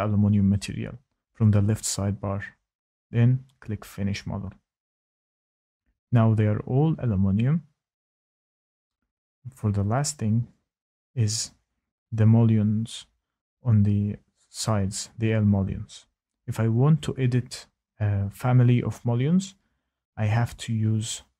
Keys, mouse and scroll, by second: 0.6 click, 3.0 click, 3.0 typing, 4.1 click, 5.3 click, 6.3-8.9 scroll, 6.9 click, 8.9 scroll, 9.5-10.4 scroll, 10.4-13.8 scroll, 13.8-15.5 scroll, 15.7 click, 16.0-16.9 scroll, 16.9-17.9 scroll, 17.9-18.7 scroll, 19.6-21.0 scroll, 21.0-21.3 scroll.